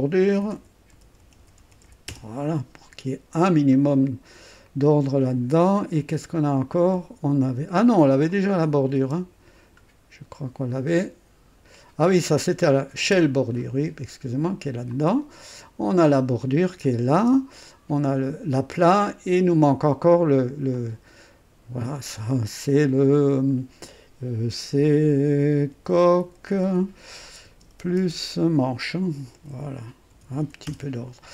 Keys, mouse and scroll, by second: 0.1-2.6 typing, 3.7 scroll up 1, 5.8-6.1 scroll up 1, 8.2 click, 9.0 typing, 9.8-10.1 scroll down 1, 10.1 middle click, 10.7-11.1 scroll down 1, 12.1 click, 13.0 typing, 13.6 scroll up 1, 14.9 click, 16.1 click, 16.6-17.4 typing, 18.7 scroll up 1, 20.7 click, 21.9 click, 23.0-30.9 typing.